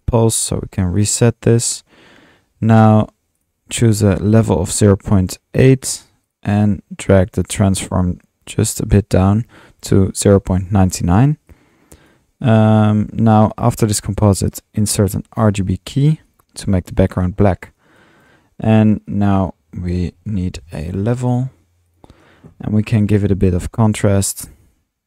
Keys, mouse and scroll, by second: 0.0-2.6 typing, 1.3 click, 1.5 middle click, 3.4 click, 6.4 click, 11.3-12.3 drag, 13.1 click, 13.8 drag, 15.0 click, 15.0-15.7 typing, 18.0 click, 19.0-19.8 drag, 19.9-21.1 typing, 21.3 drag, 21.9 click, 22.8 click, 23.7-25.0 middle drag.